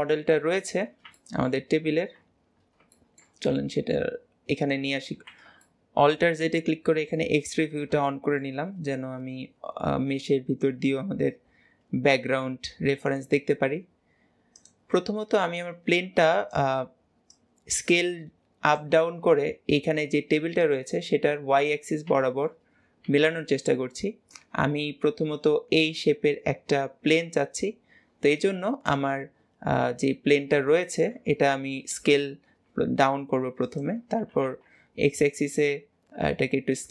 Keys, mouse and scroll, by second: 0.5 scroll down 4, 0.6 scroll up 1, 0.7-1.2 scroll down 3, 1.2-1.7 shift+middle drag, 1.7 scroll up 2, 2.7 scroll down 2, 3.0-3.5 shift+middle drag, 3.5 g, 5.1 alt+z, 5.7 shift+middle click, 6.5 scroll up 1, 6.5 scroll down 1, 6.7 scroll up 1, 7.2-7.7 shift+middle drag, 7.7-8.1 scroll up 2, 8.1-8.9 shift+middle drag, 8.9-9.8 scroll up 1, 9.8-11.0 scroll down 1, 15.6 click, 17.3 drag, 21.2-21.7 scroll up 1, 21.7 scroll up 1, 22.2-31.0 shift+middle drag.